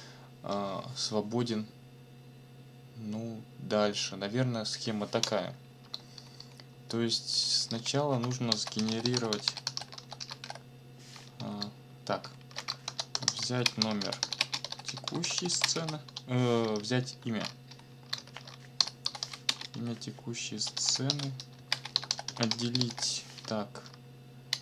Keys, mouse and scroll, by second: 6.1 ctrl+shift+Left, 8.3-10.9 typing, 11.4 ctrl+Left, 12.2 ctrl+shift+Right, 13.1 ctrl+shift+p, 13.3 ctrl+shift+z, 13.4 ctrl+shift+n, 13.5 ctrl+shift+m, 13.6-16.3 typing, 16.8 Left, 18.5-23.4 typing, 19.7 ctrl+shift+KP_1.